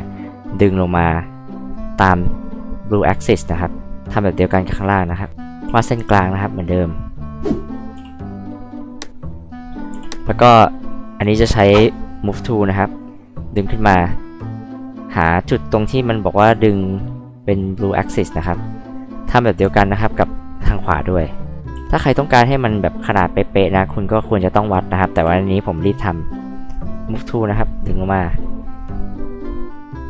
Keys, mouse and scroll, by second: 2.2 click, 2.2 right click, 2.8-3.5 scroll up 4, 5.1 click, 5.4 click, 5.7 h, 5.9-6.4 drag, 7.9 l, 9.4 click, 9.9 h, 10.1 click, 11.7 m, 12.4-13.6 drag, 17.5 click, 18.1 scroll up 2, 19.6 h, 19.7 click, 20.6 r, 21.7 f, 24.0 click, 25.1 h, 25.3 click, 27.2-30.0 drag.